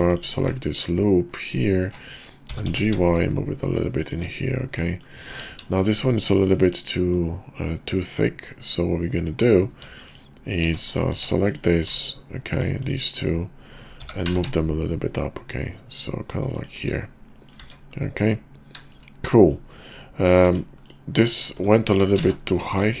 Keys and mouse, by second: 0.1 alt+click, 1.3 alt+click, 2.6 g, 4.9 middle click, 5.3 Tab, 5.7 shift+middle drag, 6.2 middle click, 6.6-6.9 drag, 6.9 middle click, 8.2-8.5 middle drag, 9.7 Tab, 10.1 click, 10.6 Tab, 10.9 click, 11.1 Tab, 11.5 click, 11.9 shift+click, 12.8 shift+click, 13.9 g, 17.5 click, 19.5 middle click, 19.8 click, 20.4 Tab, 20.8 click, 22.2 ctrl+z, 22.7 click.